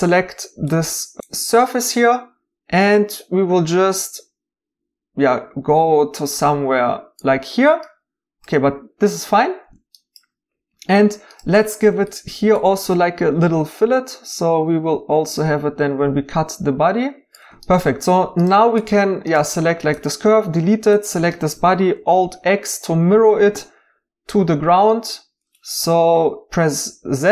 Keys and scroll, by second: 20.2 x, 23.9-24.6 typing, 25.7 z.